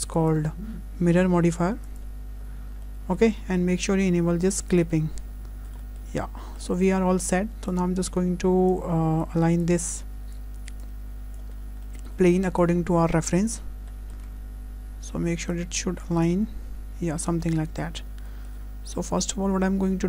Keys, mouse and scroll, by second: 0.1 click, 2.5-2.8 scroll up 2, 2.8 shift+middle click, 4.7 click, 5.5 scroll up 1, 5.8 shift+middle click, 6.2 scroll down 3, 6.4 shift+middle click, 7.2 s, 8.7 click, 9.6 click, 11.6 scroll up 2, 11.8 shift+middle click, 12.6 click, 13.6 scroll up 2, 13.9 shift+middle click, 14.2 Tab, 14.9 Tab, 15.5 click, 16.3 Tab, 17.9 scroll down 2, 18.3 shift+middle click, 19.1 Tab.